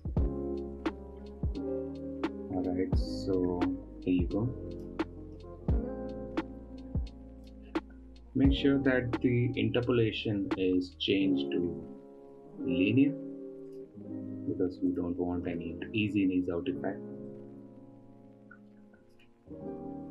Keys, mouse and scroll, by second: 5.8 ctrl+Tab, 7.9 click, 8.8 a, 9.6 KP_Decimal, 12.1 t, 15.4 click, 15.9 ctrl+Tab, 18.9-20.1 drag.